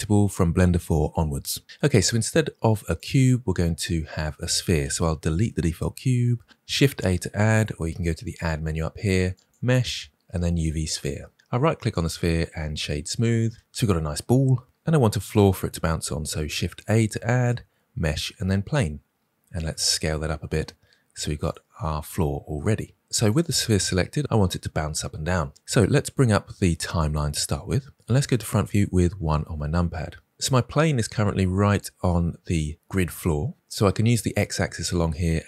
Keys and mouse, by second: 3.0 click, 5.3 Delete, 6.7 shift+a, 8.3-10.6 drag, 11.9 click, 16.8 shift+a, 19.7 s, 23.3-27.9 drag, 29.1 KP_1, 30.4 middle click, 33.5 KP_1.